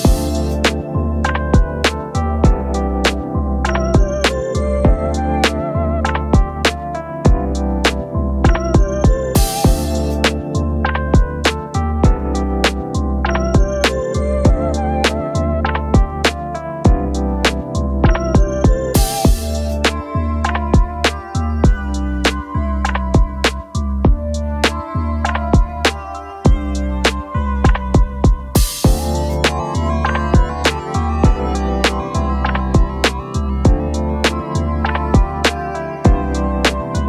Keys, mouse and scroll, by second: 3.1-3.7 space, 4.3 ctrl+scroll down 3, 5.1 alt+scroll down 2, 12.3 shift+click, 21.3 right click, 32.1 shift+click.